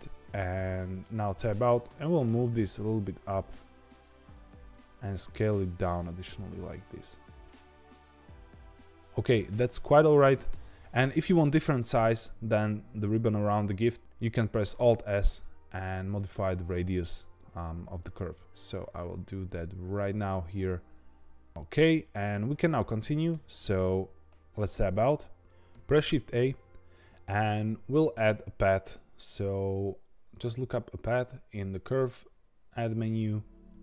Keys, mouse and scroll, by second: 0.5 middle click, 1.1 Tab, 1.9 g, 4.4 Tab, 4.8 s, 10.7-13.1 middle drag, 13.4-14.8 right drag, 14.8 alt+s, 21.5-23.3 middle drag, 23.3 Tab, 26.3 shift+a.